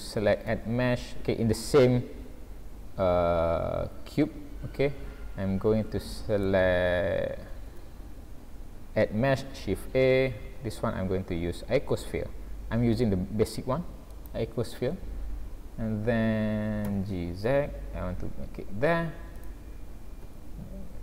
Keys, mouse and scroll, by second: 0.5 shift+a, 7.7 shift+a, 14.9 scroll down 3, 15.3-16.0 scroll up 1, 16.0 scroll up 1, 16.9 g, 20.2 s.